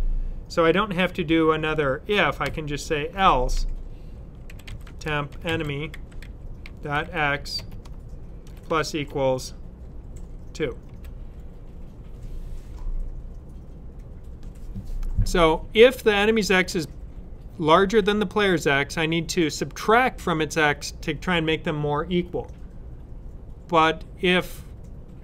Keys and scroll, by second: 2.3 shift+[, 4.1-7.3 typing, 8.3 typing, 10.0-10.7 typing.